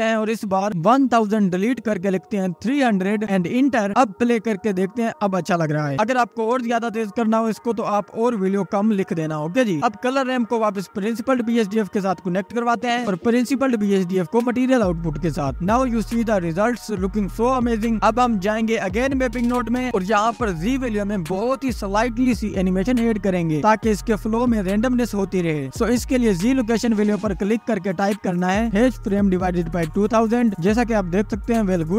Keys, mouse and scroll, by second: 0.5-1.7 drag, 1.7 BackSpace, 4.4-5.5 drag, 5.5 scroll up 1, 6.6 ctrl+s, 7.2 click, 9.3 space, 9.9-11.4 drag, 11.7 KP_0, 12.6 click, 12.9 space, 13.5 click, 14.8 click, 15.4-16.7 drag, 16.7-17.1 scroll up 2, 17.1 space, 17.8 click, 19.9 scroll up 10, 20.1-21.7 drag, 22.0-24.3 drag, 28.9-30.9 drag, 31.4 space, 31.8 ctrl+s.